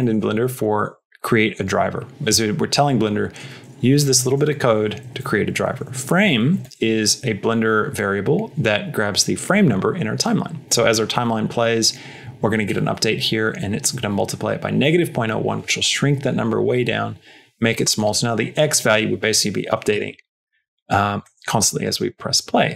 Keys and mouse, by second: 3.9 Right, 4.1 Right, 5.3 Right, 5.3 Left, 5.4 Left, 6.5 Right, 6.5 Left, 6.9 Right, 21.2 middle click, 21.7 space.